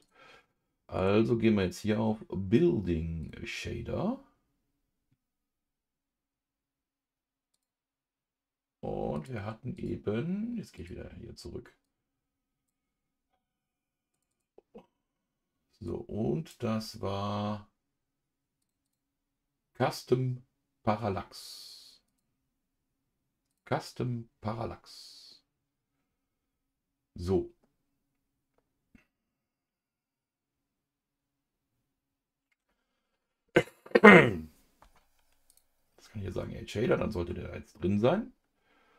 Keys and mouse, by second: 1.0-3.2 drag, 22.1-23.6 drag, 35.4 click.